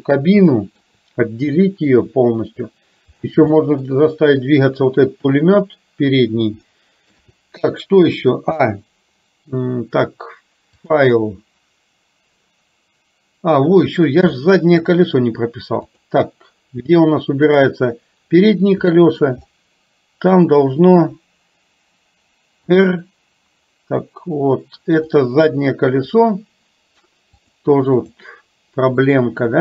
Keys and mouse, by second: 0.6 shift+middle click, 1.8 shift+middle click, 3.6 shift+middle click, 6.8 shift+middle click, 10.9-12.5 drag, 14.4 shift+middle click, 16.0 click, 17.6 click, 19.0 shift+middle click, 20.4 click, 22.6 r, 27.4 click.